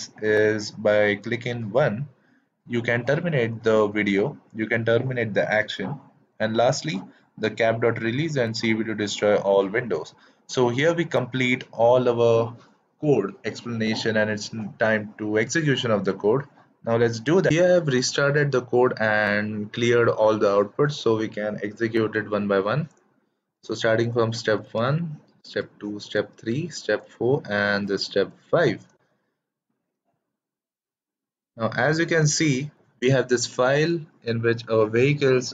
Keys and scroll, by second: 24.5 shift+Return, 25.3 shift+Return, 26.1 shift+Return, 27.0 shift+Return, 28.2 shift+Return.